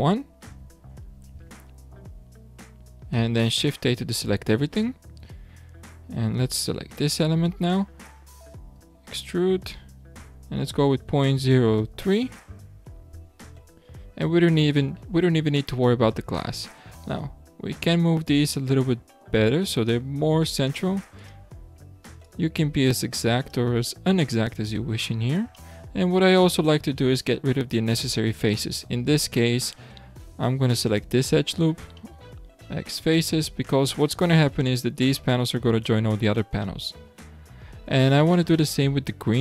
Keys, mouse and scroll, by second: 1.3 alt+a, 6.6 l, 8.7 e, 16.5 scroll up 1, 17.1 alt+a, 18.2 l, 19.7 click, 21.2 click, 22.2 click, 24.0 scroll down 2, 24.7 scroll up 2, 25.5-26.6 shift+middle drag, 26.6-27.1 scroll down 4, 27.1-29.0 middle drag, 29.0 3, 30.8 alt+click, 32.0-32.7 middle drag, 32.7 x, 36.3-37.4 middle drag, 37.4-38.2 scroll up 6, 38.2-39.0 shift+middle drag, 39.0-39.4 scroll up 5.